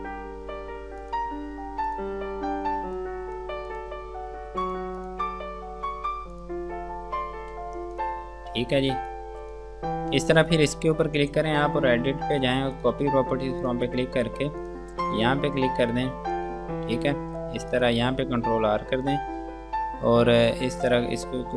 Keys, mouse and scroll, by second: 7.8 space, 8.2 click, 8.5-8.9 scroll down 1, 8.9 F2, 9.3 click, 18.0 click, 19.0 ctrl+r, 21.0 click.